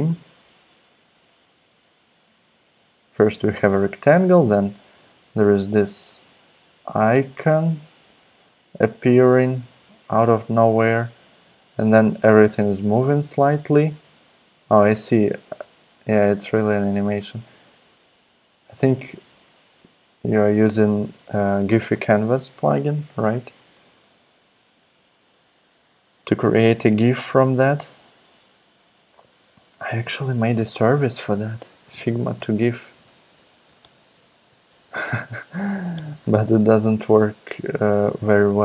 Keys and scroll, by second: 29.8 super+Tab, 31.4-37.1 typing.